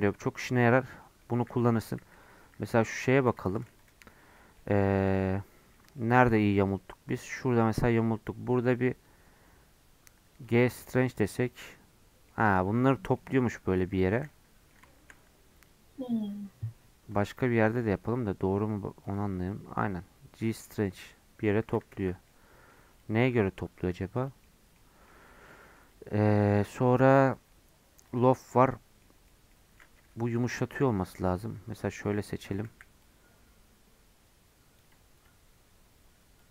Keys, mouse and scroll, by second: 0.1-1.8 middle drag, 1.8 scroll up 1, 1.8 middle click, 2.0 3, 2.2-3.4 middle drag, 3.8 alt+click, 4.1 middle click, 4.4 scroll up 1, 4.6-6.6 middle drag, 6.6 alt+click, 7.4 middle click, 7.7-10.8 right drag, 10.8-14.0 middle drag, 14.0 ctrl+z, 14.3-15.6 middle drag, 15.6-17.3 right drag, 17.3 alt+click, 17.7-19.5 right drag, 19.5-21.9 middle drag, 21.9 ctrl+z, 22.3 middle click, 22.9-25.1 right drag, 25.1 middle click, 25.8-28.5 right drag, 28.5-30.4 middle drag, 30.4 3, 30.6 middle click, 31.4-31.8 scroll down 2, 31.8 middle click, 32.3 scroll up 1, 32.4 middle click, 32.7 c, 35.2-36.5 right drag.